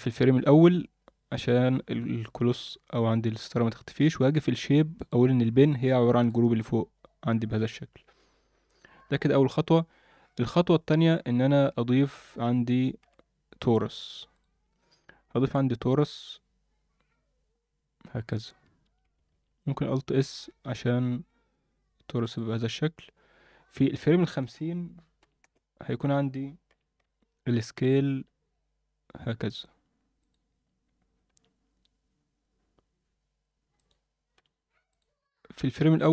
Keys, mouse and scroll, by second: 2.5-2.8 scroll down 2, 4.9-6.3 drag, 4.9-6.3 scroll down 5, 11.7 shift+a, 13.8 shift+s, 14.6 shift+a, 18.8 Tab, 19.3 alt+s, 22.8 Tab, 24.2-25.5 drag, 26.7 g, 27.9 click, 28.1 s.